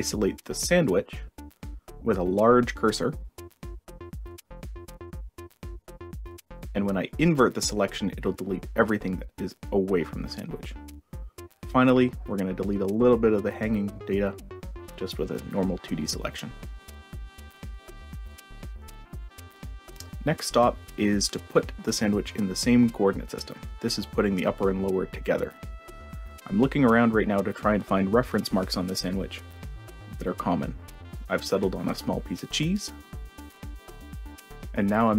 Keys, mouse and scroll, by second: 0.2 click, 0.9-2.2 ctrl+scroll up 8, 2.4 ctrl+scroll down 2, 3.6 ctrl+scroll down 2, 4.1 ctrl+scroll up 2, 5.7 ctrl+click, 6.9 click, 7.5 click, 8.2 click, 11.8-12.4 ctrl+scroll down 2, 12.5-13.9 ctrl+drag, 14.1-15.3 drag, 16.2 click, 16.6 click, 17.5 click, 19.8 click, 20.2 shift+click, 20.2 shift+right click, 20.9 click, 21.5 shift+drag, 22.0 shift+drag, 22.3 shift+drag, 22.6 shift+click, 22.9 shift+click, 23.5-24.6 drag, 24.9-26.4 drag, 27.2 click, 28.6 click, 30.4-31.4 drag, 31.7-33.3 shift+drag, 33.4-34.4 drag, 34.6 right click.